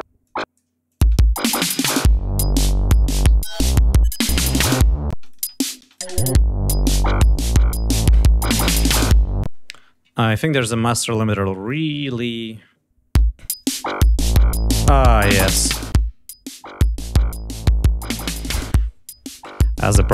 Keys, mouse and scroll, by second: 0.1 click, 0.8 click, 0.9 space, 2.3 ctrl+scroll down 2, 3.2 g, 3.4 click, 4.1 alt+d, 5.0 space, 5.1 click, 5.8 click, 6.4 ctrl+scroll down 2, 6.8 ctrl+scroll up 2, 9.3 space, 9.9-10.7 scroll up 2, 11.6 click, 13.0 l, 13.4 click, 15.2-18.1 drag.